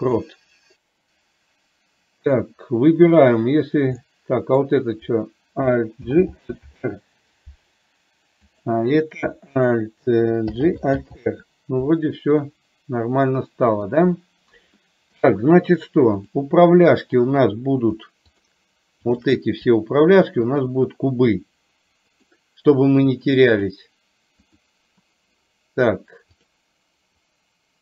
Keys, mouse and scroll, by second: 0.2-2.5 middle drag, 4.1-4.7 middle drag, 6.1 alt+g, 11.1 alt+r, 12.6-14.0 middle drag, 15.0 middle click, 18.5 shift+click, 19.1 shift+click, 22.4-23.9 drag, 24.6 click, 26.5 click, 27.4-27.8 drag.